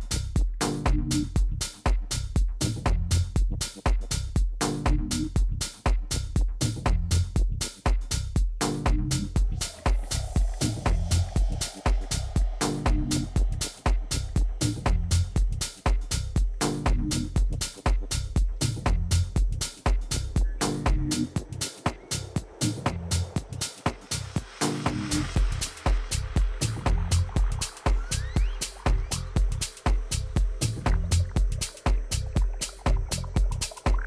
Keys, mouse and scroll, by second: 0.9 b, 5.8-7.5 drag, 9.9 a, 10.9-12.7 middle drag, 11.5 a, 11.8 a, 13.0 b, 14.9 a, 16.9 b, 18.5-20.4 drag, 20.4 a, 20.7 b, 21.8-23.7 drag, 22.8 a, 24.0 b, 25.5-27.4 drag, 27.9 a, 28.4 b, 29.8-31.7 drag.